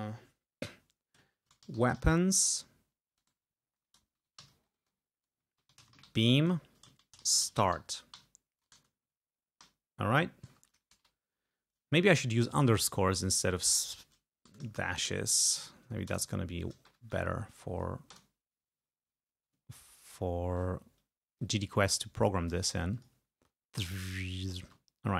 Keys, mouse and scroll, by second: 1.2-9.7 typing, 13.6 click, 14.5 BackSpace, 14.8 shift+-, 15.3 shift+End, 15.7 ctrl+shift+Left, 16.1 ctrl+shift+BackSpace, 16.9 shift+-, 17.4 shift+End, 18.2 Return, 19.7-20.4 ctrl+scroll down 4, 21.4-22.7 drag, 23.0 click, 23.4 space, 24.7 space, 24.9 ctrl+scroll down 2.